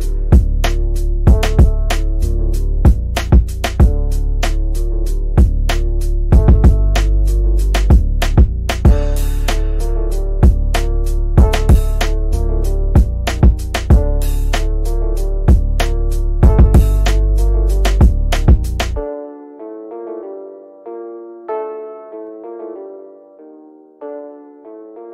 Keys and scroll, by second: 7.7 shift+F2, 10.8 Escape.